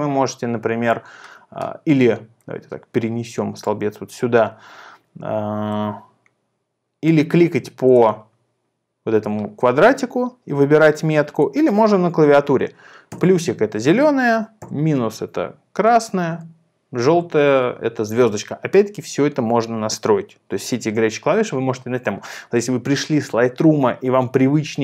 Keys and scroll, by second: 14.7 *, 16.3 *.